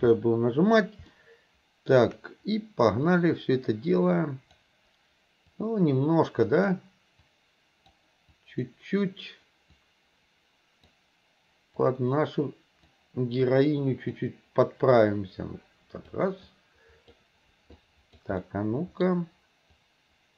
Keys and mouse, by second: 1.2 shift+middle click, 3.1-4.6 drag, 5.5-6.7 drag, 7.3 click, 8.4 click, 9.8-10.9 drag, 11.9-12.9 drag, 13.5 click, 15.0-16.2 drag, 16.5 click, 17.9 click, 18.4 middle click, 19.8-20.3 drag.